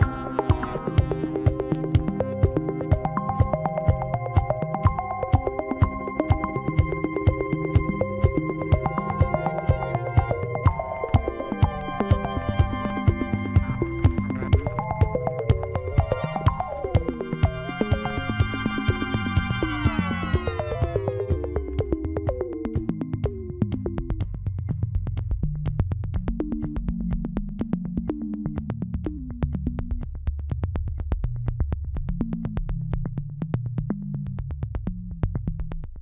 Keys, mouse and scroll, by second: 0.3-2.0 shift+middle drag, 2.0 e, 6.6 e, 9.5 e, 10.7 shift+middle click, 11.0-11.6 scroll up 1, 11.6 e, 12.3 e, 17.5 scroll down 2, 17.8 shift+middle click, 18.5 e, 20.4 shift+middle click, 20.6-21.2 scroll up 4, 21.2 e, 21.8 e, 23.9 e, 25.8 shift+middle click, 26.8 e, 27.4 e, 28.7 e, 30.5-30.9 scroll down 7, 31.2-32.5 shift+middle drag, 32.5 Tab, 33.2 scroll up 1, 34.0-36.0 shift+middle drag.